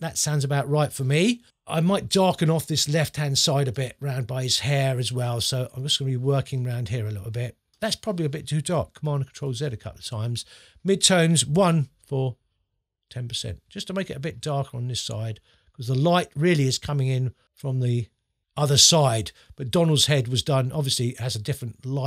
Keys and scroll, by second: 2.3 space, 9.0 super+z, 11.5 1.